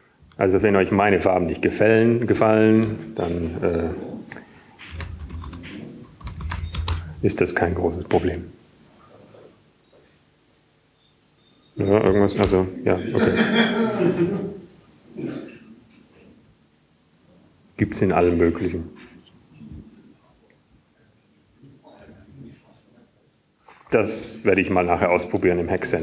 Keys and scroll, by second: 8.3-11.4 typing, 16.0 Return.